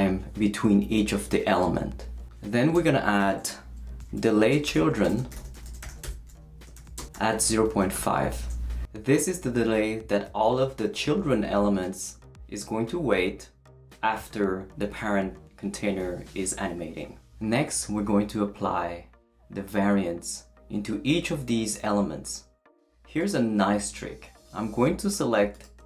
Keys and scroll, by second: 2.7 Return, 3.8-7.9 typing.